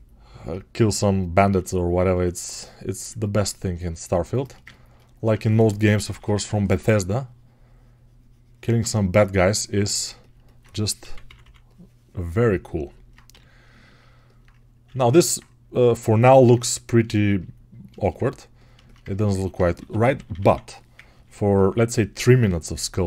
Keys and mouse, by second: 14.3-23.0 right drag, 21.0 ].